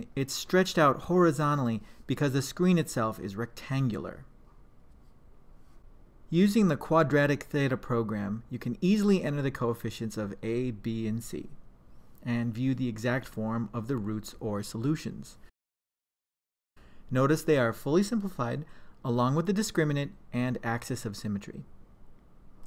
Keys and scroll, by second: 6.3 3, 7.5 Return, 10.0 2, 10.4 Return, 10.7 4, 11.1 Return, 11.4 7, 12.0 Return.